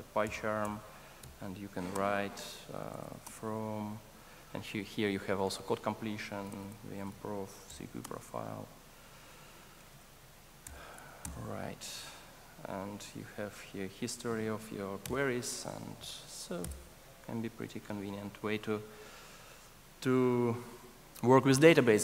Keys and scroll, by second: 0.7 Return, 7.6 Return, 11.4 super+Return, 17.9 super+s.